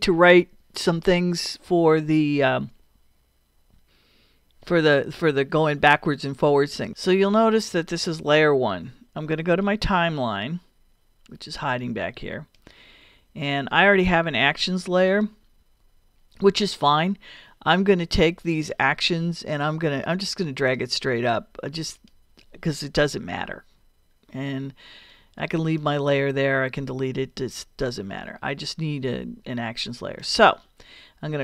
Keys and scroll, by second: 23.2 BackSpace.